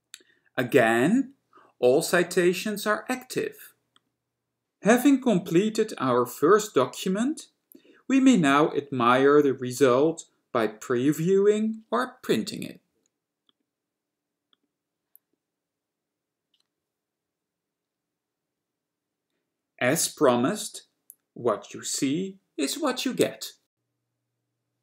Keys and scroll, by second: 15.5 F4.